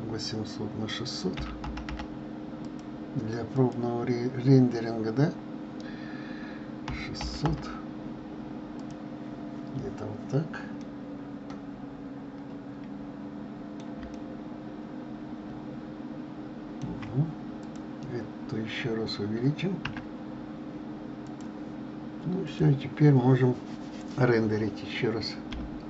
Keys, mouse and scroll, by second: 2.7 0, 3.7-6.7 drag, 8.9 0, 11.0-13.9 middle drag, 14.3-17.3 shift+middle drag, 17.7 click, 20.0 s, 22.6 click, 25.8 F12.